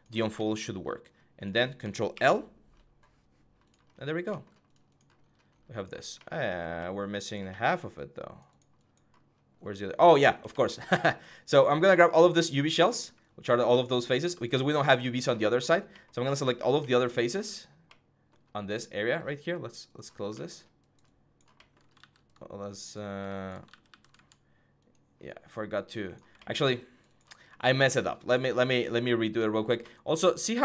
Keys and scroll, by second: 21.7 ctrl+z, 23.4 ctrl+z, 23.6 ctrl+z.